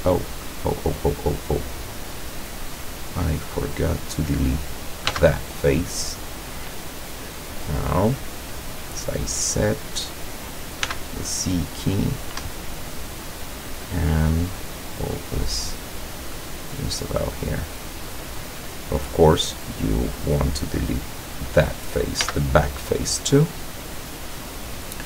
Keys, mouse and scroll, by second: 0.3 middle click, 3.4 click, 4.2 right click, 5.2 x, 5.7 click, 6.9-7.3 middle drag, 7.5-7.8 scroll up 1, 10.0 click, 10.9 c, 11.5 click, 12.5 Escape, 12.8-13.4 middle drag, 14.0-14.5 middle drag, 14.9-17.3 drag, 17.4-18.6 middle drag, 19.5 click, 20.2 right click, 22.3 x, 22.8 click, 23.7-25.0 middle drag.